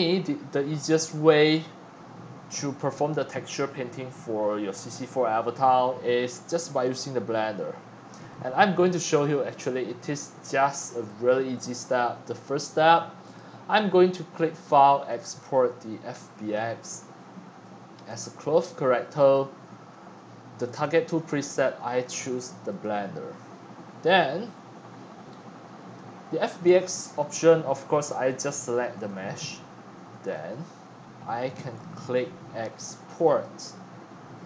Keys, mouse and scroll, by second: 3.9 scroll, 4.0 scroll, 4.2 scroll, 4.3 scroll, 4.4 scroll, 4.7-5.0 scroll down 4, 5.1 scroll, 6.9-8.6 drag, 9.8 click, 10.2 click, 13.2 click, 15.1 click, 16.4 click, 18.1 click, 20.2 drag, 20.6 click, 26.7 click, 28.9 click, 30.5 scroll up 1, 31.1 scroll up 1, 33.3 click.